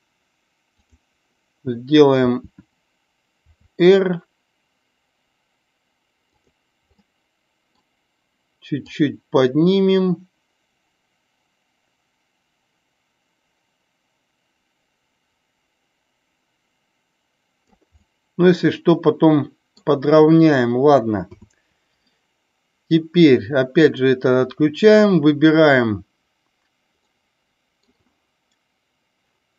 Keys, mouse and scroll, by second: 0.6 click, 6.3 click, 6.9-7.6 middle drag, 8.8-17.6 drag, 18.0-19.8 middle drag, 21.3 KP_7, 26.9-27.8 middle drag.